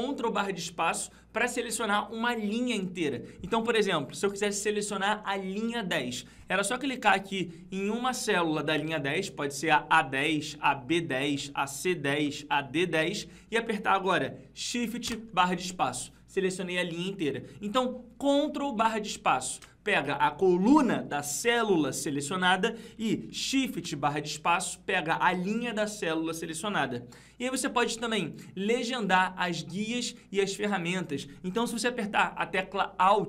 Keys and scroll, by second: 19.4 ctrl+space.